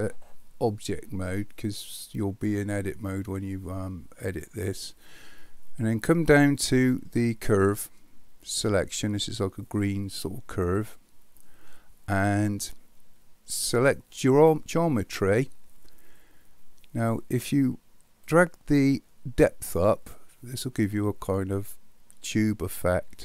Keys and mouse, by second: 10.8 click, 14.4 click, 18.4-23.2 drag.